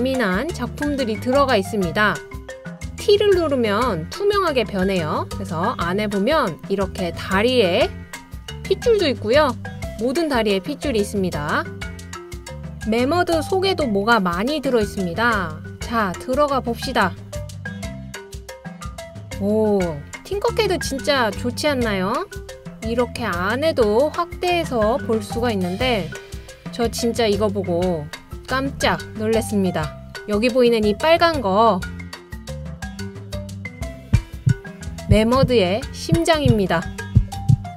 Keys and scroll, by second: 1.4 t, 2.2 t, 4.5 t, 6.0 t, 6.5 t, 7.4 t, 11.1 typing, 13.8-14.6 typing, 16.0-16.6 typing, 19.1 typing.